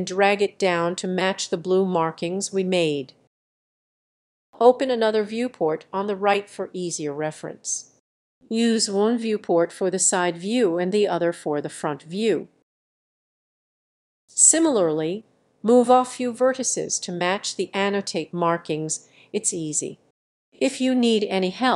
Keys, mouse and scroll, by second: 0.2 g, 0.8-3.9 drag, 4.0 middle click, 4.5-7.6 drag, 7.6 middle click, 9.8 click, 10.9 click, 11.1-12.0 scroll up 3, 12.0-13.1 drag, 13.3 click, 13.9 g, 14.6 click, 14.9 click, 15.0-21.3 typing, 15.3 click, 15.9 click, 16.4 click, 17.2 click, 17.6 click, 18.5 click, 19.3 click, 19.7 click, 20.4 click, 21.1 click.